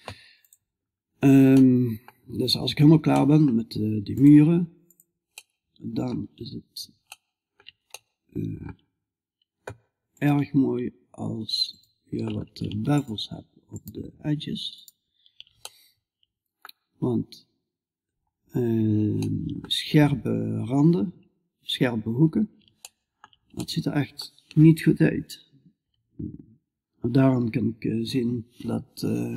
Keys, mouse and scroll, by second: 1.0 middle click, 2.6 middle click, 2.9-4.4 middle drag, 4.4 click, 4.9 right click, 5.0-15.1 middle drag, 15.1 right click, 15.4 middle click, 17.1-18.7 middle drag.